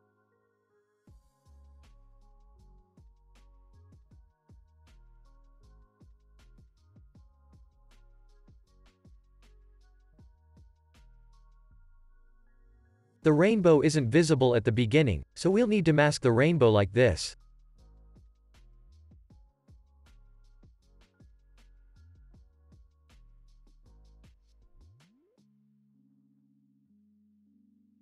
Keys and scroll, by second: 8.3 F9, 9.1 ctrl+s, 14.4 space, 18.5 space, 26.4 ctrl+s, 27.1 x.